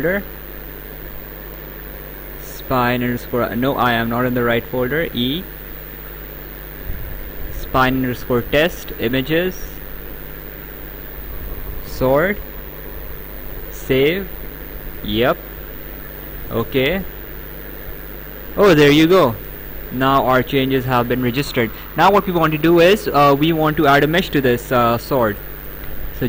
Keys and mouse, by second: 0.2 click, 4.9 click, 6.2 click, 6.4 a, 7.5 click, 8.8 click, 10.9 click, 13.4 click, 14.9 click, 16.3 click, 17.2 alt+Tab, 20.0 right click, 26.0 click.